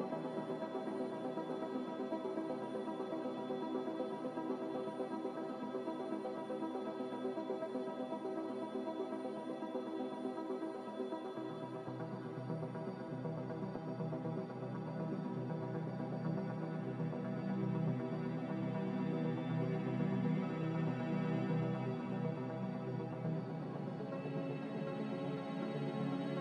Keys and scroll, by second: 9.4 1, 10.2 Return, 14.0 0, 14.2 Return.